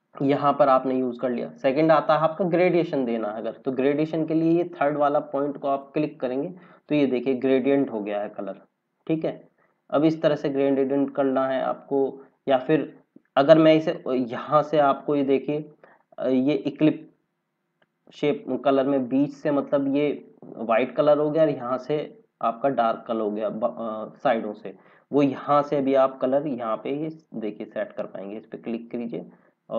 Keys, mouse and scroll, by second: 5.6 click, 17.7 click, 25.4 click, 28.6 click.